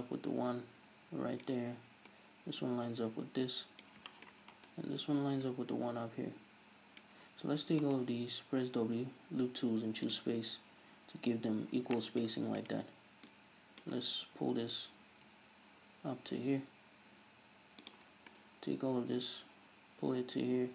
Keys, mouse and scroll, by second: 2.1 right click, 4.1-4.7 shift+middle drag, 4.7 right click, 7.9-9.0 ctrl+right drag, 9.0 w, 12.0-12.6 shift+middle drag, 12.6 right click, 13.3-18.0 drag, 14.2 g, 18.3 right click.